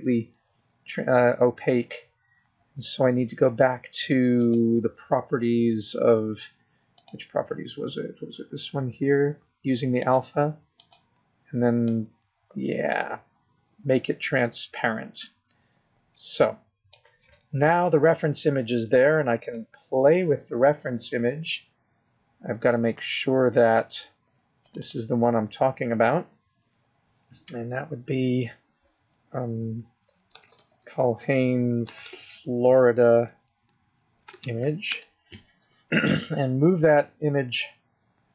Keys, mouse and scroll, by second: 0.6 click, 6.3 click, 8.9 click, 12.7 click, 13.8 click, 20.0-20.6 scroll up 1, 21.3 click, 23.7 scroll up 2, 26.5 click, 26.7 click.